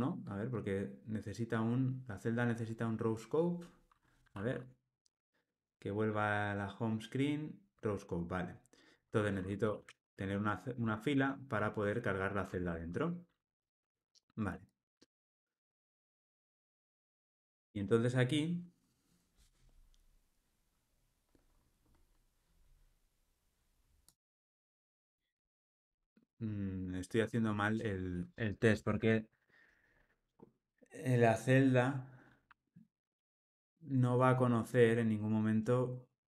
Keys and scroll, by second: 2.0 alt+super+], 6.4 Escape, 7.9 alt+super+[, 10.8 Return.